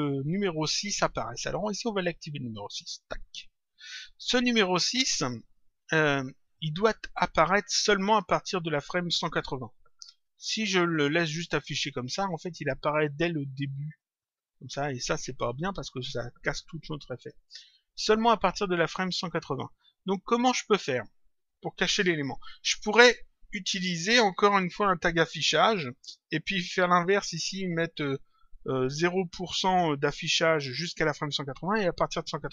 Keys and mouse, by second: 2.9 click, 12.1 click, 13.8 click, 19.1 click, 20.5 click, 25.5 click.